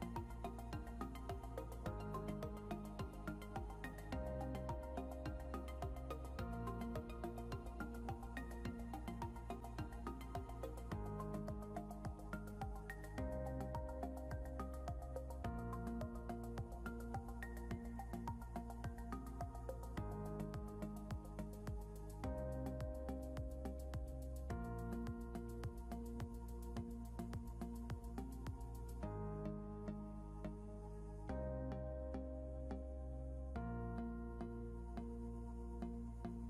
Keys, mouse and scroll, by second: 2.4 click, 16.6 click, 17.0 scroll up 1, 20.3 click, 21.4 scroll down 1, 22.2 scroll down 1, 23.5 click, 26.7 scroll up 1, 27.6 click, 28.8 scroll up 1, 29.3 click.